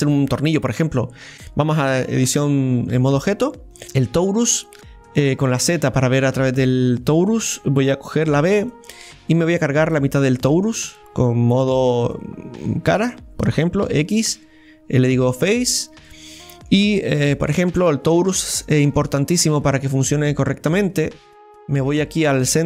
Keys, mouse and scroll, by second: 1.0-1.3 scroll up 3, 1.2 middle click, 1.3 shift+a, 2.0 Tab, 3.7 click, 3.8 shift+a, 4.4-4.8 scroll up 2, 4.8 KP_3, 5.4 z, 7.2-8.4 right drag, 11.9-13.8 drag, 15.9 scroll down 1, 16.0-17.2 middle drag, 17.2 Tab, 17.6 middle click, 18.1-18.9 scroll up 1, 18.9-20.7 shift+middle drag, 20.7-22.6 drag.